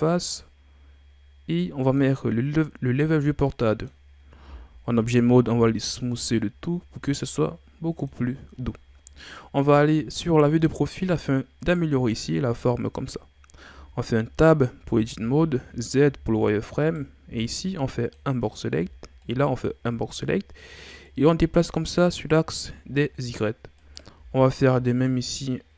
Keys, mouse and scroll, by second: 0.1-1.5 drag, 1.8-3.5 drag, 3.5 middle click, 4.4 w, 5.5 a, 5.8-6.2 scroll down 3, 6.2-8.3 middle drag, 8.3-9.2 scroll up 1, 9.5 KP_7, 10.7-11.2 shift+scroll up 5, 11.6 right click, 12.1-13.7 scroll up 1, 13.7 Tab, 14.8 z, 15.8 shift+scroll up 2, 16.8 right click, 17.2 b, 18.8 b, 20.1-21.0 scroll up 2, 21.0-23.7 drag, 23.7 right click, 24.2 b.